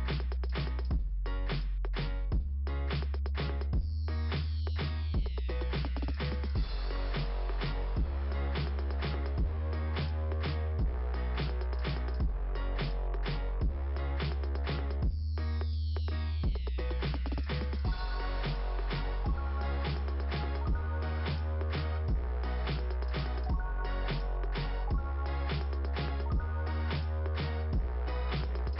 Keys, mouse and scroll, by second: 0.2 click, 1.0 click, 4.7 click, 9.4 click, 9.5 click, 13.5 click, 13.7 click, 15.6 click, 15.9 click, 17.7 click, 17.8 click, 21.3 click, 21.4 click, 23.0 click, 23.1 click, 23.9 click, 24.2 click, 26.8 click, 26.9 click, 27.4 scroll up 2.